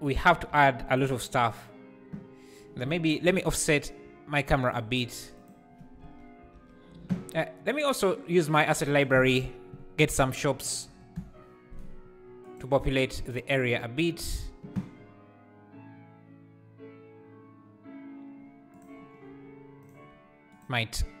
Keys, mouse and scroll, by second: 0.9 click, 4.0 r, 4.8 g, 6.0 alt+a, 8.3 click, 12.6 click, 13.4-18.8 drag, 19.8-21.2 shift+right drag.